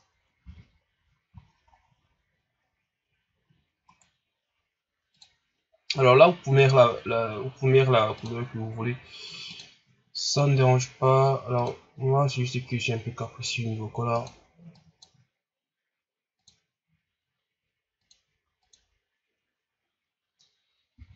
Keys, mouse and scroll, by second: 0.4 a, 1.3 shift+scroll down 3, 1.7 scroll up 1, 3.8 right click, 5.4 click, 20.9 a.